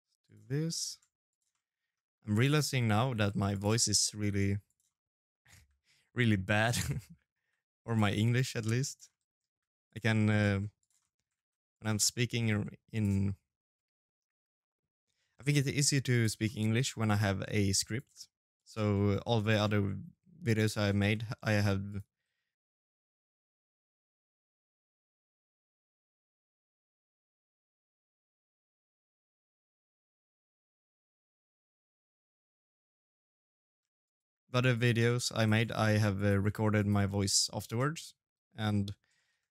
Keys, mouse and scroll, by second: 0.1 shift+d, 1.2 middle click, 1.6 shift+d, 2.3 middle click, 2.8 g, 3.4 middle click, 3.9 shift+d, 4.5 middle click, 5.0 shift+d, 5.7 middle click, 6.3 g, 7.6 middle click, 8.2 g, 8.8 middle click, 9.2 shift+d, 9.8 middle click, 10.3 g, 10.8 middle click, 11.2 shift+d, 11.8 middle click, 12.1 shift+d, 12.7 middle click, 13.2 shift+d, 14.5 middle click, 16.2 middle click, 18.2 middle click, 18.2 click, 18.8 shift+middle click, 18.9 shift+middle click, 19.2-19.6 scroll down 3, 20.2 shift+d, 22.0 s, 22.8 g, 23.7 shift+d, 25.0 shift+d, 25.9-39.5 shift+d.